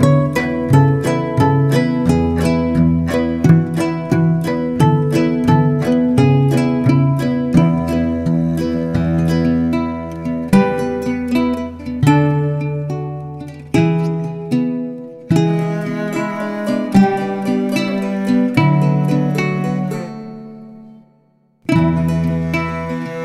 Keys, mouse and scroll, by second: 0.0-0.2 typing, 0.5 scroll down 2, 0.7 Tab, 0.8 click, 1.1 scroll down 1, 1.3 shift+click, 1.7 Tab, 1.8 scroll down 3, 1.9 shift+middle click, 2.1 scroll up 1, 2.8-3.9 drag, 7.8-13.1 drag, 13.7-16.4 scroll down 1, 16.4-22.2 drag.